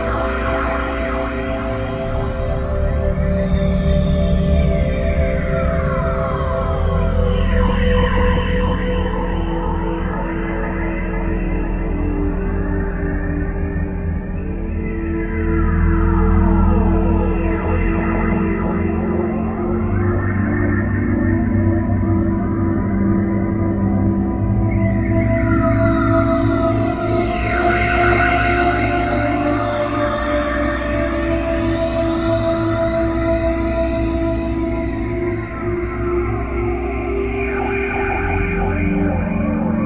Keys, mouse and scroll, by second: 3.1 click, 7.2 middle click, 8.8 click, 16.1 right click, 17.1 middle click, 18.9 click, 33.7 click, 35.6 click, 37.1 click.